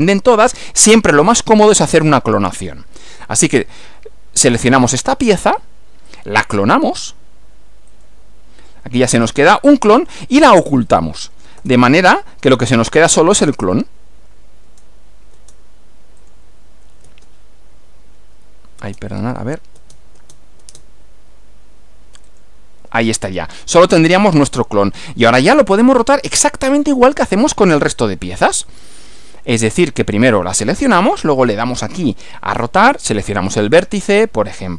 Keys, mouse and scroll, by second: 3.6 click, 6.1 click, 7.9 click, 9.4 click, 11.6 space, 13.0 click, 13.4 space, 14.6 space, 16.2 click, 17.0 space, 18.1 space, 19.2 click, 19.8 space, 22.3 click, 28.0-28.8 middle drag, 29.0 shift+scroll up 1, 29.0 shift+scroll down 1, 29.2 scroll up 1, 30.3 click, 31.9 click.